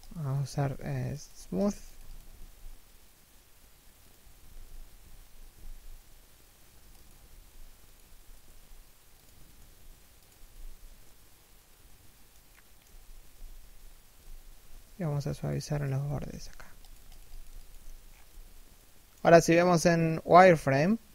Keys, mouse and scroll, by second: 1.9 alt+s, 4.3 z, 4.7 alt+w, 5.2 alt+s, 7.5 Tab, 7.6 a, 7.9 right click, 8.0 g, 9.2 right click, 9.3 g, 10.7 middle click, 12.5 3, 12.8 1, 13.6 z, 14.3 Tab, 15.0 alt+right click, 15.7 z, 15.8 w, 17.6 scroll down 1, 17.8 z, 18.3 shift+middle click.